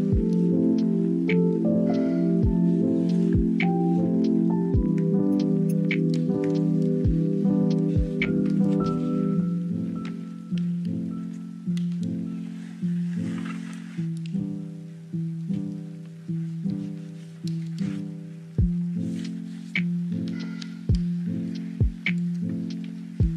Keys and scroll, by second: 0.8-4.2 typing, 5.9 ctrl+s, 6.0 space, 8.9 space, 11.3 space, 11.7 space, 12.2 space, 12.8 space, 14.6 space, 15.0 ctrl+z, 19.2 space, 20.6 ctrl+z, 22.2 space.